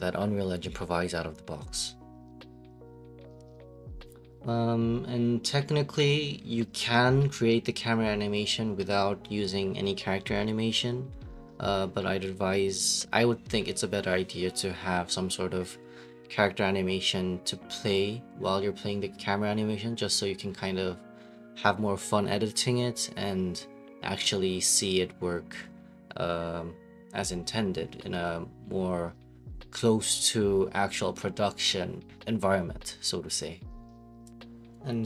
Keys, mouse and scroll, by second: 2.0 ctrl+space, 4.0 click, 4.3 click, 9.1 click, 10.9 click, 11.1 click, 12.0 click, 12.2 click, 13.7 click, 13.9 click, 15.7 click, 15.8-16.9 typing, 17.6 click, 18.2 click, 18.4 click, 18.9 typing, 21.1 click, 21.2 click, 27.3 click, 29.1 right click, 33.1 click, 34.4 click, 34.6-35.0 scroll.